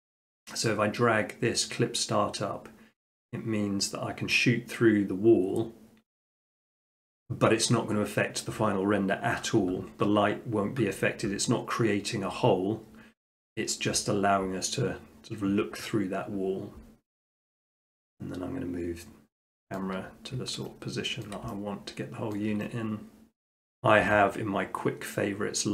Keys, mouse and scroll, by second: 6.2-7.4 drag, 19.8 middle click, 21.3 ctrl+middle click, 21.8 scroll, 22.4 shift+scroll, 23.6 q, 24.0 q.